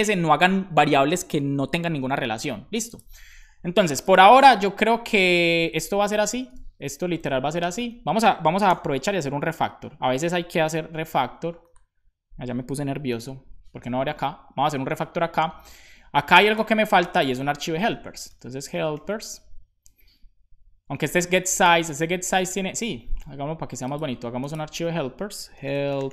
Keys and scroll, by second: 8.6 super+j, 9.5 super+n, 13.1 super+b, 17.9-19.3 typing, 20.9 Escape, 25.3-26.1 typing.